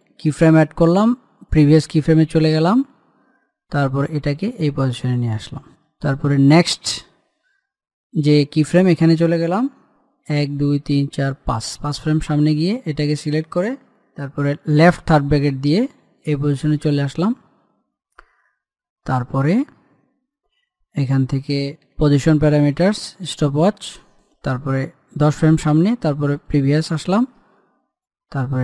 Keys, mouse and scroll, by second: 0.2 click, 4.7-7.0 drag, 10.5 Page_Down, 13.0 click, 22.2 p, 23.1 click, 24.5 Page_Down.